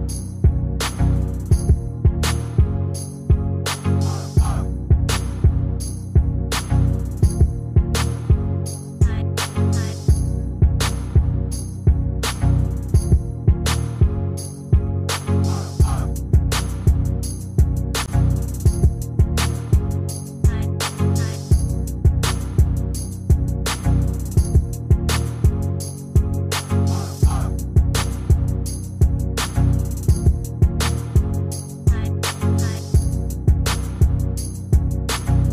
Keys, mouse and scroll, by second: 2.9 ctrl+z.